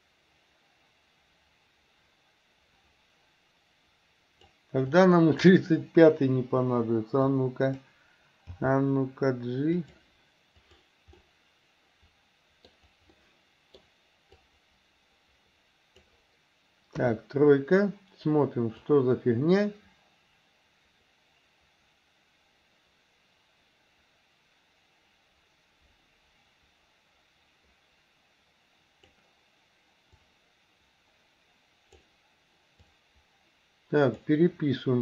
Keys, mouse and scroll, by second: 4.9-5.5 drag, 6.5 Delete, 7.3-7.9 drag, 8.6 g, 10.7 click, 11.2-12.7 middle drag, 13.2-13.8 middle drag, 14.5-16.2 drag, 17.0 KP_3, 18.9-29.2 drag, 30.4-32.0 drag, 33.0-34.3 drag.